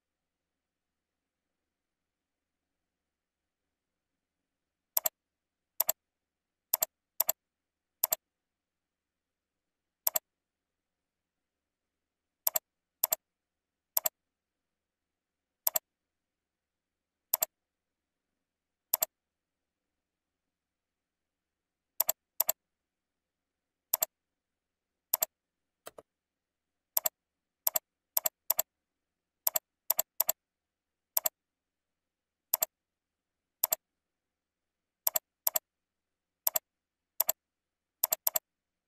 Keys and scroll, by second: 6.5 ctrl+c, 7.6 ctrl+v, 9.3 ctrl+e, 18.5 ctrl+c, 19.9 ctrl+v, 29.2 ctrl+c, 30.4 ctrl+v, 34.5 ctrl+c, 35.7 ctrl+v, 37.8 ctrl+c, 38.5 ctrl+v.